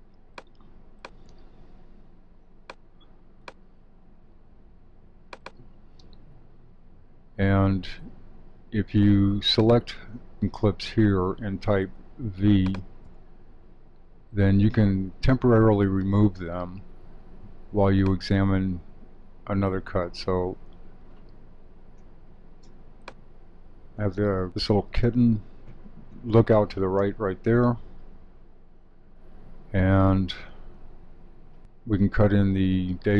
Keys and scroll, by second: 24.4 Right.